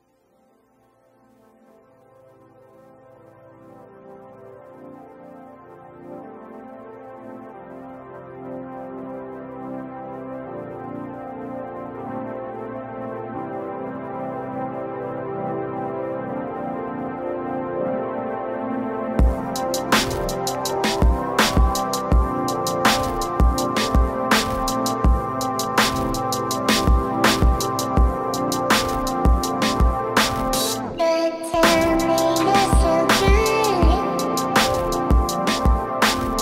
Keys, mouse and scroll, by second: 4.5 click, 5.8 click, 6.7 t, 7.1 click, 8.2 click, 9.2 click, 13.7 click, 14.7 click, 16.1 click, 16.9 click, 19.8-23.3 drag, 23.5 click, 25.5 t, 25.8 click.